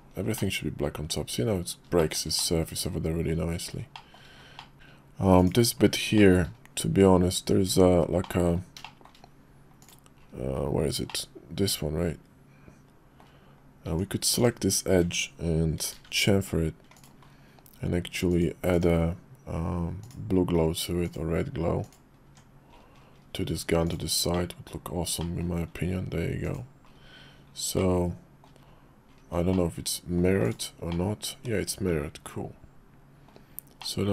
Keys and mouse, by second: 0.4 middle click, 2.0 shift+middle click, 2.4 middle click, 3.9 shift+middle click, 4.6 middle click, 5.4 click, 6.2 shift+middle click, 7.7 Tab, 8.2 middle click, 8.8 middle click, 9.8 click, 11.1-13.2 middle drag, 13.9 Tab, 14.4 click, 15.7 ctrl+b, 18.3 click, 18.7 click, 20.3-21.6 drag, 21.8 click, 22.3 Tab, 23.8 click, 24.3 middle click, 25.2 middle click, 26.4 click, 27.8 middle click, 29.5 middle click, 30.4 click, 30.9-33.3 middle drag, 33.8 middle click.